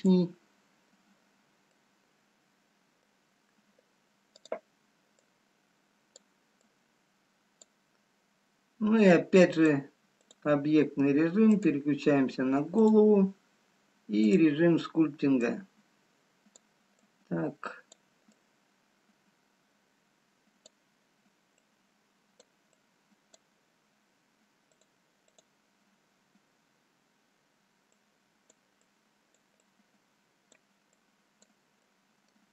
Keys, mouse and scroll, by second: 2.3 middle click, 4.5 click, 5.5 click, 10.2 click, 12.6 click, 22.1 click, 23.0 click, 23.9-24.9 scroll down 2, 24.9 click, 25.9 click, 32.4 click, 32.4 middle click.